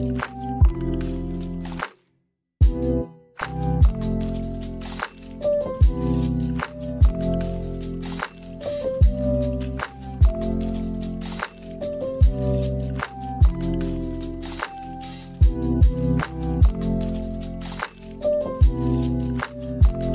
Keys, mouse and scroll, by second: 0.3 click, 0.8 space, 1.1 middle click, 1.6-2.0 scroll down 2, 1.8 middle click, 2.7 space, 2.9 middle click, 3.7-4.2 scroll up 1, 4.2 middle click, 5.0 click, 5.9 click, 6.1 middle click, 6.5 space, 7.7 space, 8.1 middle click, 10.0 click, 12.9 click, 15.6 click, 17.3 click, 18.7 shift+a.